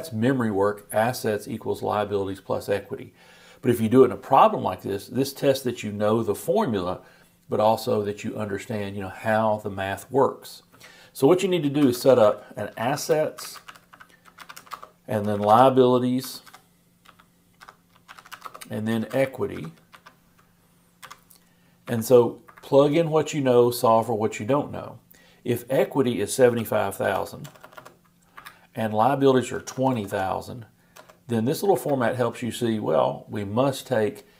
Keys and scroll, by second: 13.4 shift+BackSpace, 13.7 shift+s, 15.1-16.0 typing, 18.8-19.6 typing.